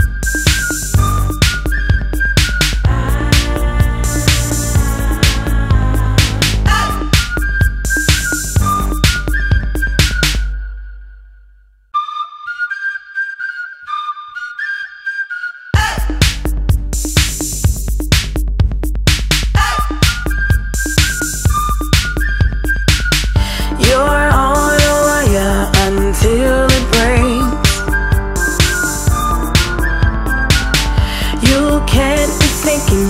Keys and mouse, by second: 0.8 click, 3.3 click, 5.8 click, 9.2 click, 10.3 click, 10.9 click, 12.2 ctrl+click, 12.8 ctrl+click, 13.9 ctrl+click, 15.7 click, 15.8 right click, 18.7 click, 20.9 click, 21.9 click, 22.6 click, 23.5 click, 28.6 click, 30.7 click, 30.8 click, 32.9 click.